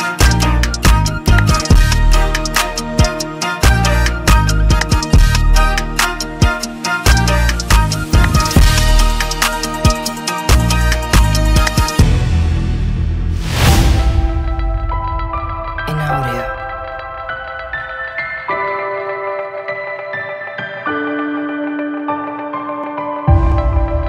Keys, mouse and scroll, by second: 1.3 click, 2.6 click, 3.6 click, 4.8 click, 5.9 click, 7.0 click, 10.4 click.